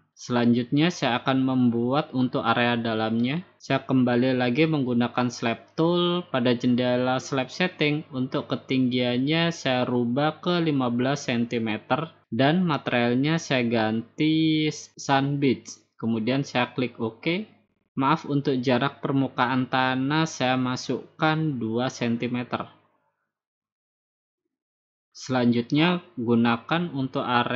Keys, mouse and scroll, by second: 3.3-5.5 drag, 8.4 typing, 10.5-11.5 drag, 12.7-13.8 drag, 14.5-15.6 drag, 17.1-18.2 drag, 20.7-21.8 drag, 22.7 2, 24.7-25.9 drag.